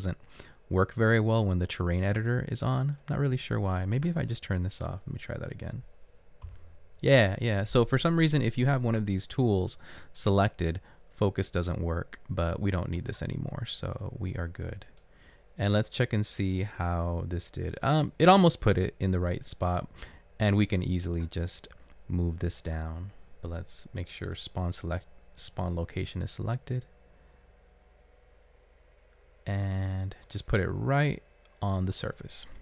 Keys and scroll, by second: 6.5 f.